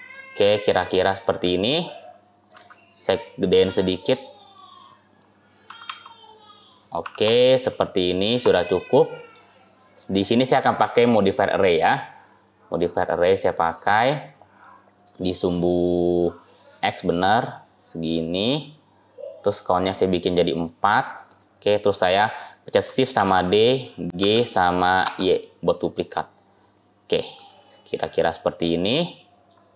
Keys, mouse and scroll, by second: 0.1-0.4 scroll up 1, 0.4 scroll down 5, 0.4-0.8 scroll up 3, 0.8 middle click, 1.2-2.4 scroll down 2, 2.4 s, 5.5 g, 6.9 g, 8.3 click, 8.6 scroll up 1, 8.6 middle click, 9.8 click, 11.6 click, 14.5 middle click, 16.4 click, 19.8 click, 20.3 click, 21.9 click, 23.0 shift+d, 27.3 click, 27.6-28.2 scroll down 4, 28.2 middle click, 29.6-29.7 scroll up 2.